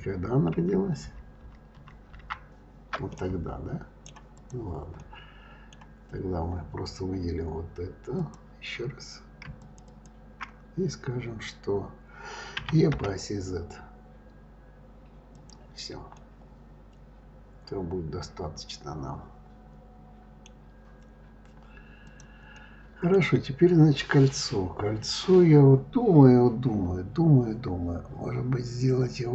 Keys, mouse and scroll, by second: 0.6 ctrl+z, 1.0 ctrl+z, 1.4 ctrl+z, 1.7 ctrl+z, 2.1 ctrl+z, 2.2 ctrl+z, 3.1-4.3 middle drag, 4.3 click, 5.0 middle click, 5.7-6.3 scroll down 1, 6.3-6.7 scroll up 3, 8.1 click, 9.5 shift+click, 9.8 shift+click, 12.6 e, 16.1-19.1 middle drag, 20.6-22.0 scroll down 1, 22.0 click, 22.5-25.6 middle drag.